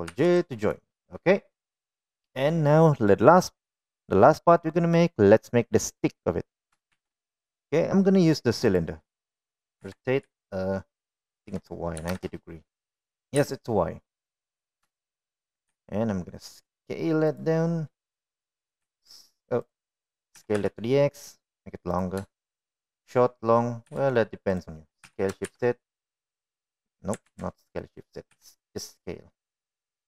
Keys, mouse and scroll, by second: 1.4 ctrl+j, 1.9 click, 8.3 shift+a, 11.3 r, 14.8 g, 16.4 shift+middle click, 17.1 s, 20.2 s, 21.8 s, 24.2 shift+middle drag, 25.3 s, 26.5 s, 28.1 middle click, 28.8 ctrl+z, 29.2 middle click, 29.8 s.